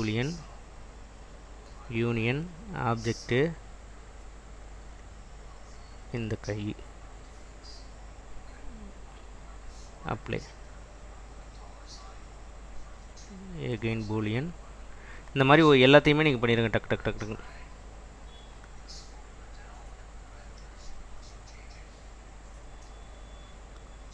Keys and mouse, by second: 1.7 click, 2.7 click, 10.3-12.2 drag, 14.1-16.4 drag, 17.8 click, 18.6 click.